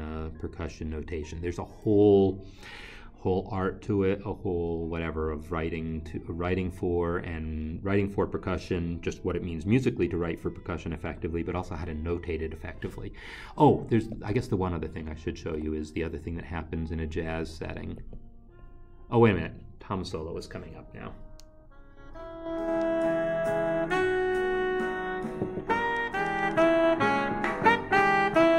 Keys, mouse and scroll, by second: 14.2 click, 15.5 q, 18.2 click, 19.7 click.